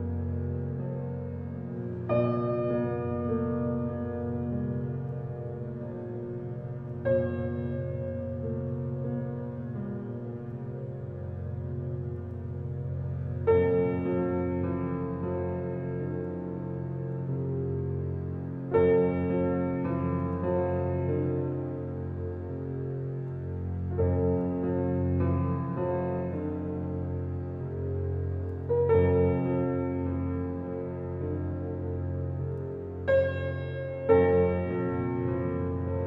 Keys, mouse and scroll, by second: 1.3 click, 11.8 scroll down 1, 12.7 Escape, 13.5 alt+click, 14.3-16.6 alt+middle drag, 16.6 click.